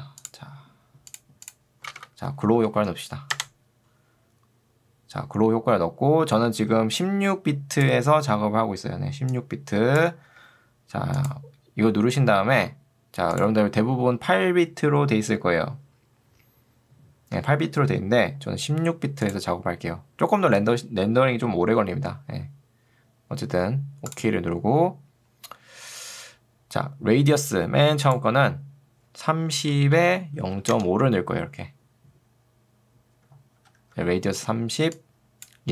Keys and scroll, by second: 2.0 ctrl+space, 2.4 g, 3.0 w, 3.4 Return, 6.8 ctrl+2, 10.4 Escape, 30.0 Tab, 30.8 Return, 33.8 ctrl+2.